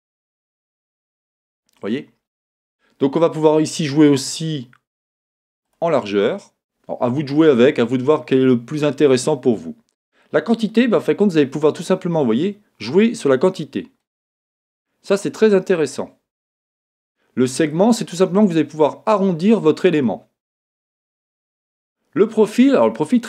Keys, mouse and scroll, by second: 1.2-2.6 scroll up 2, 4.1-23.2 drag.